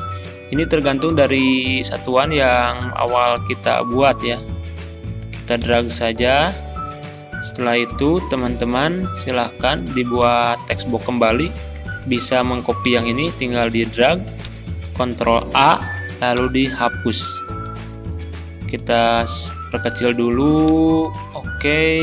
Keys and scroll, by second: 14.8 ctrl+a, 16.4 Delete.